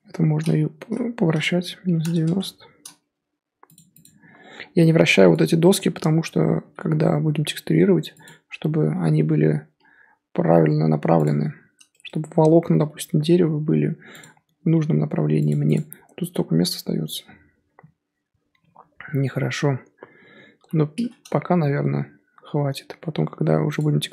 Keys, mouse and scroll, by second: 0.0 l, 0.8 r, 3.1 g, 4.0 click, 5.7-6.1 scroll up 2, 6.6 g, 9.7 s, 14.4 g, 15.7 click, 20.6 l, 21.3 g.